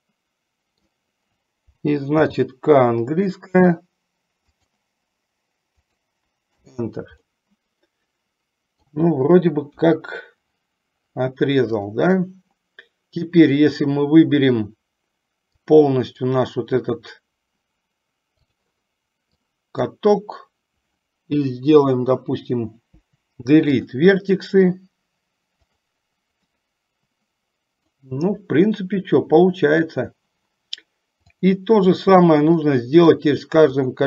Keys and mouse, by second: 2.3 k, 7.4-9.3 middle drag, 9.9 KP_1, 11.9 click, 15.7 click, 18.8 click, 19.7 click, 23.0 Delete, 26.1 click, 26.7-28.2 middle drag, 31.4 click, 33.0 middle click.